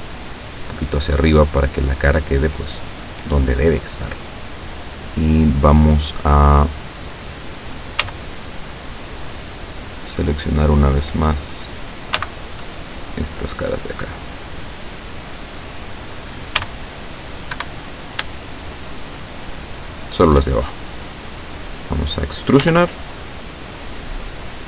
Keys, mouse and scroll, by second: 1.4-2.6 middle drag, 8.1 a, 8.7 middle click, 9.5-11.7 middle drag, 12.3 c, 12.7-13.0 scroll up 1, 13.6 click, 16.6 a, 17.6 Escape, 18.6 shift+right click, 19.0 shift+right click, 19.6 shift+right click, 20.0 shift+right click, 21.6 middle click, 22.6 e, 24.0 click.